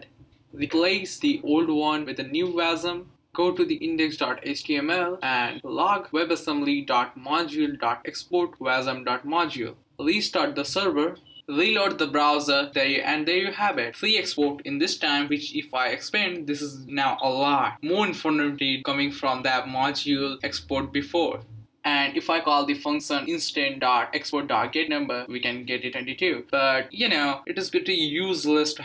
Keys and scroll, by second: 4.3-10.0 typing, 10.0 ctrl+c, 10.1 Up, 10.4 Return, 21.8 BackSpace, 23.0 Tab, 23.9 typing, 24.9 Return, 28.5 Return, 28.5 shift+9.